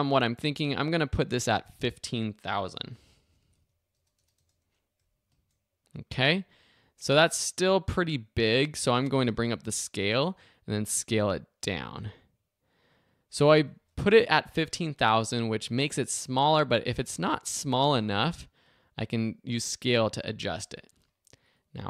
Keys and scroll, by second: 1.4 0, 2.7 space, 3.2 super+a, 3.4 super+i, 3.5 5, 3.9 0, 5.3 Return, 9.4 s.